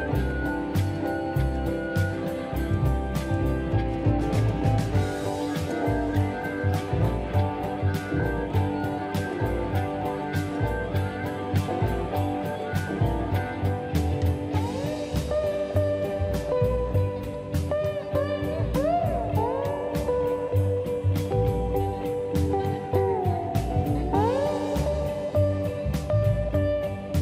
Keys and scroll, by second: 7.9 m, 12.5 q, 13.8 space, 15.7 q, 21.0-21.9 typing, 24.1 m.